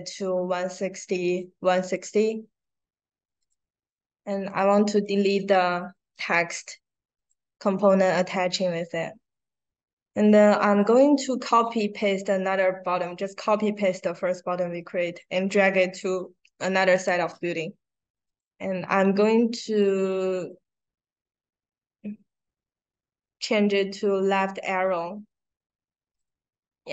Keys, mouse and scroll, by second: 1.7 click, 3.3 click, 3.7 drag, 4.4 click, 4.9 click, 7.1 click, 14.8-17.0 drag, 19.5 click, 20.0 middle click, 20.0-20.4 scroll down 1, 20.9 middle click, 20.9 scroll down 1, 22.4 middle click, 22.4-22.9 scroll down 1, 23.1 middle click, 24.5 middle click, 24.5-25.3 scroll down 2, 26.1 click.